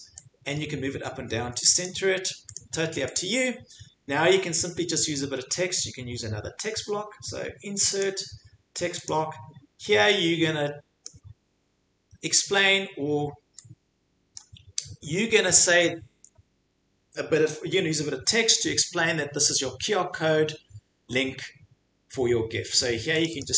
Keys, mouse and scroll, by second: 1.8 click, 2.5 click, 3.2 click, 8.0 click, 9.1 click, 11.0 click, 14.4 click, 23.2 click, 23.4 click.